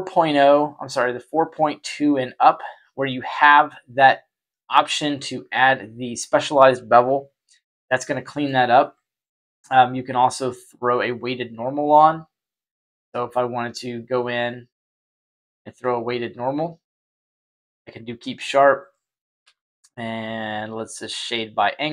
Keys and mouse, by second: 6.1-8.4 middle drag, 9.7 right click, 10.8-16.2 drag, 17.6 click, 19.3 q, 21.8-21.9 middle drag.